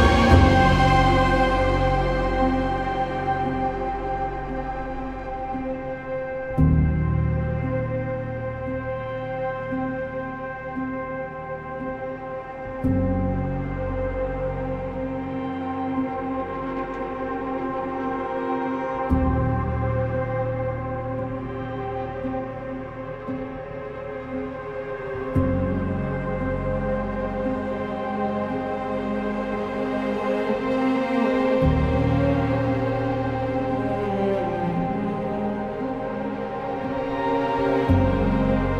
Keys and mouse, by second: 0.3 click, 1.7 g, 2.0 z, 2.7 click, 4.2 g, 4.5 z, 5.3 click, 5.5 g, 5.6 y, 6.5 click, 7.6 Tab, 11.7 click, 13.0-14.8 drag, 15.4 Tab, 15.9 2, 16.3 alt+click, 17.1 g, 17.2 y, 18.9 1, 20.1 g, 21.7 click, 24.8 click, 26.1 3, 26.3 click, 26.7 ctrl+KP_Add, 26.8-27.3 ctrl+KP_Add, 28.0-29.2 right drag, 30.2 1, 30.4 click, 31.4 g, 32.3 click, 32.8 click, 33.0 g, 33.8 click, 34.7 g, 35.8 click, 36.6 g, 37.6 click, 38.2 click, 38.4 g.